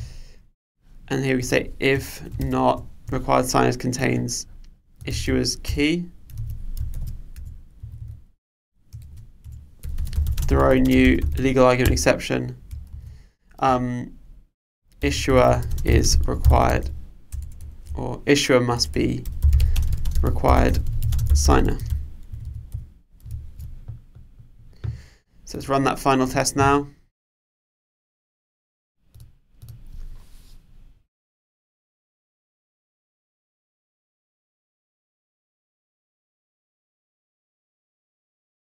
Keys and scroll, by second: 5.6 shift+Return, 6.3 super+z, 7.3 Return, 11.9 Return, 23.4 super+s.